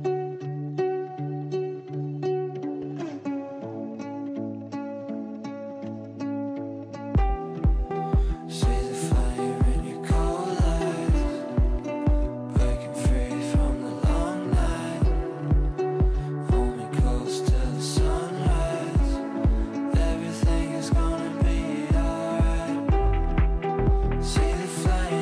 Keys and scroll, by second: 0.2 Down, 2.9 ctrl+z, 9.3 Delete.